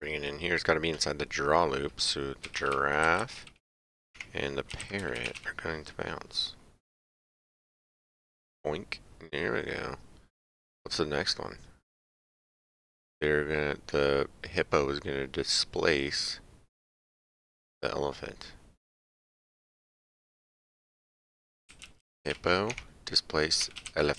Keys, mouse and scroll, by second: 2.5 g, 4.1 Tab, 5.0 r, 6.8 click, 20.0 click, 22.3 p, 22.7 Tab, 23.9 l.